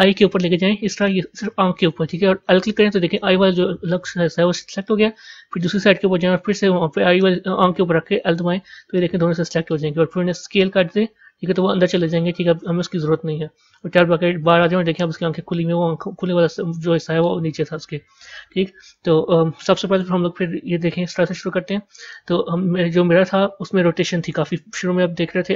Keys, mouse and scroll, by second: 4.7-7.8 middle drag, 8.8-10.4 middle drag, 13.8 Tab, 14.5-17.5 middle drag, 19.8 KP_0.